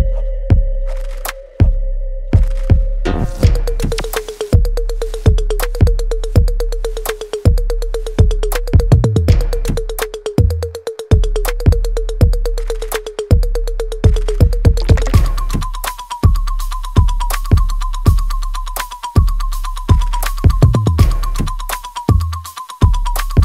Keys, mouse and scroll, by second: 2.2 ctrl+b, 3.6-5.2 drag, 5.2 ctrl+click, 6.4 right click, 6.9 click, 7.1 alt+right click, 7.9 alt+middle click, 8.6 alt+right click, 9.3 click, 9.4 alt+click, 10.6 alt+right click, 10.9 alt+middle click, 11.4 alt+right click, 11.8-17.2 alt+drag, 17.2 alt+middle click, 17.6 alt+right click, 18.0 alt+click, 18.5 alt+middle click, 18.9 alt+right click, 19.8 ctrl+s, 20.3 right click, 20.9 click, 21.3 alt+right click, 22.6 click.